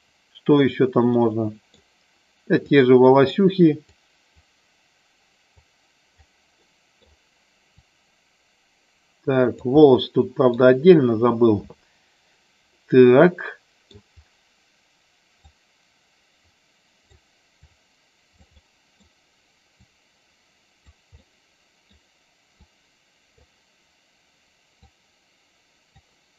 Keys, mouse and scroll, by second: 1.1 middle click, 2.6 click, 4.0 click, 5.6 click, 6.6 middle click, 7.8-9.5 drag, 9.8 middle click, 12.7-13.8 middle drag, 15.5-17.1 drag, 17.6 click, 18.5 middle click, 19.7-20.8 drag, 21.2 middle click, 22.7 click, 24.8-25.9 drag.